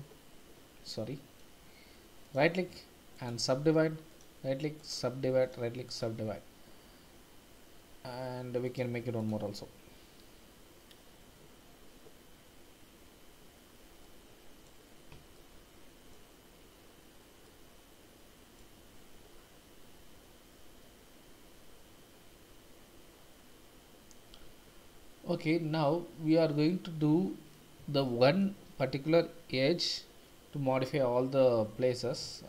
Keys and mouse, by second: 0.8 click, 2.3-4.9 drag, 5.5 click, 8.6 click, 14.0 middle click, 15.4 shift+middle click, 17.5-18.6 middle drag, 26.5-27.5 middle drag, 28.1 shift+middle click.